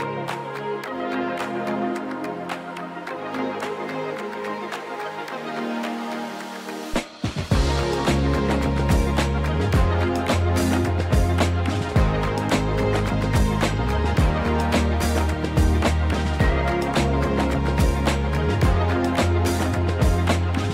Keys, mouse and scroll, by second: 0.3 g, 0.3 z, 2.8 click, 4.1 click, 5.0-7.2 drag, 6.5 KP_0, 8.8-10.8 scroll down 1, 10.8 g, 10.8 z, 12.1 click, 17.3 click.